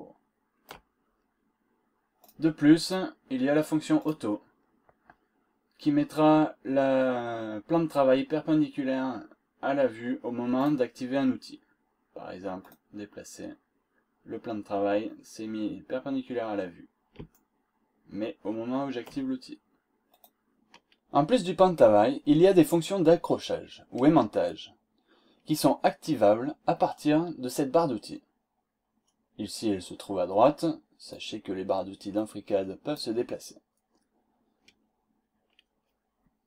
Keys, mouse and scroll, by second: 2.2 click, 2.9 click, 3.9 click, 5.4-5.8 scroll up 1, 5.9 scroll down 2, 6.5 scroll up 2, 9.4 scroll up 2, 10.6 click, 12.6 click, 15.0-15.4 scroll down 2, 16.0 scroll up 2, 17.3-19.2 shift+right drag, 20.1 click, 31.0-33.1 drag.